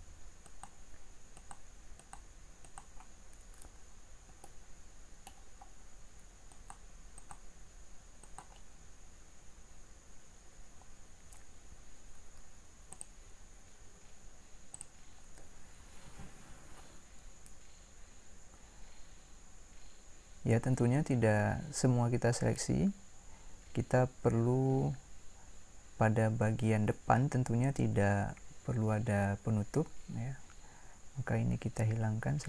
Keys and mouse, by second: 17.2-22.0 middle drag.